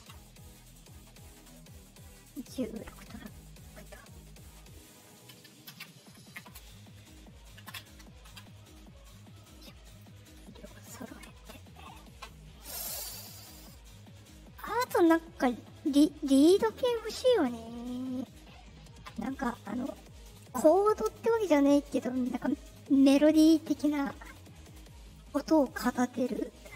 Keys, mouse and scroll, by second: 4.8 middle click, 6.2 Escape, 7.0 middle click, 9.3 middle click, 9.3 scroll up 2, 9.8 click, 10.8 click, 25.1-25.5 drag.